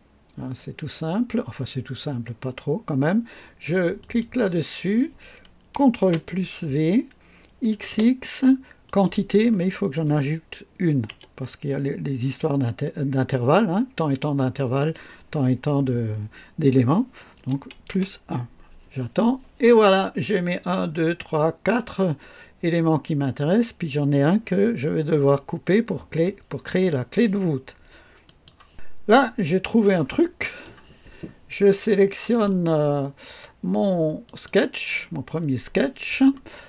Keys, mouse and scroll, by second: 4.0 click, 6.0 ctrl+v, 7.7 x, 8.8 click, 11.1 KP_Add, 17.3 KP_1, 17.9 KP_Enter, 28.2 click, 29.1-29.4 scroll up 2, 29.6-29.9 scroll down 2, 30.1-30.8 right drag, 34.2 click.